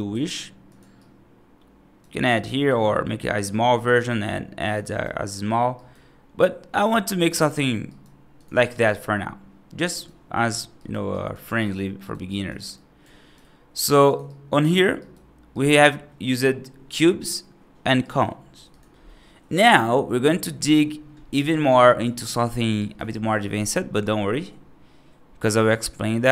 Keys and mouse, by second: 0.0 g, 0.8-1.9 right drag, 2.2 right drag, 2.5 s, 3.4 right click, 3.7 g, 4.7 right drag, 5.6 right drag, 6.7 x, 7.7 right drag, 8.5 right drag, 9.8 right drag, 10.6 right click, 11.0 right drag, 11.5 right drag, 11.9 right drag, 12.1 right drag, 12.6 alt+right click, 13.6 s, 14.1-14.5 right drag, 14.9 right drag, 15.4 right drag, 17.9 right drag, 18.5 click, 18.9 middle drag, 19.6 F3, 20.1 right click, 20.5 middle click, 21.4 right click, 22.1 middle click, 22.6 right click.